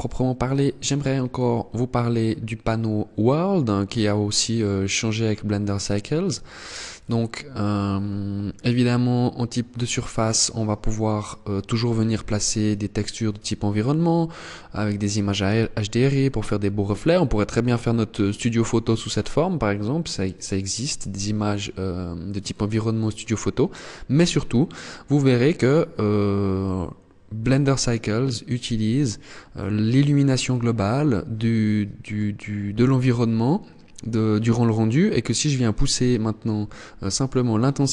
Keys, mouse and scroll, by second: 0.9 click, 6.6 click, 10.8 click, 27.1 click.